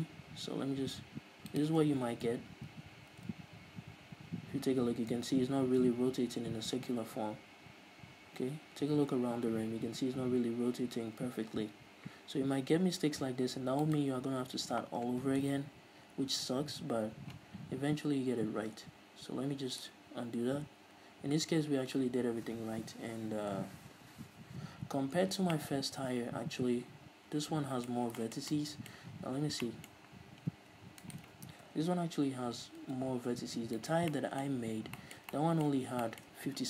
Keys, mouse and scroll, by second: 0.1 g, 1.9 middle click, 1.9 shift+click, 2.2 Tab, 2.3-2.9 scroll down 1, 3.0 r, 14.3 right click, 14.6-14.9 scroll up 1, 19.8 ctrl+z, 25.9-31.5 middle drag, 29.7-30.0 scroll down 2, 31.1 r, 31.5 right click, 32.0 KP_3, 32.9 r, 34.3 right click, 34.5-36.6 middle drag, 34.9-35.3 scroll up 2, 36.2 scroll down 1.